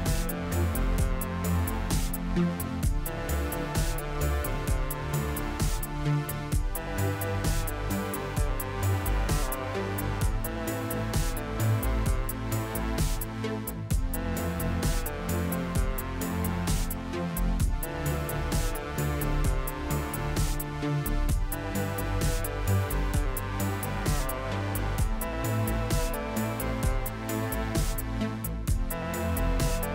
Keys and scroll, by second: 4.9 KP_Divide, 5.4 Tab, 8.2 Tab, 9.0 a, 10.7 a, 13.6 Tab, 15.1 Tab, 15.9 a, 20.1 s, 24.5 Tab, 25.1 Tab, 29.7 s.